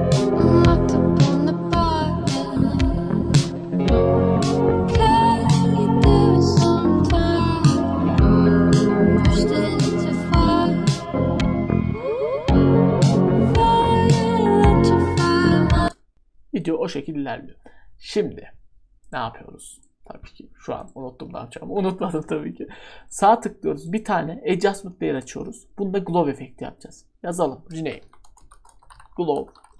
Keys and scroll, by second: 27.7 Caps_Lock, 28.0-29.7 typing.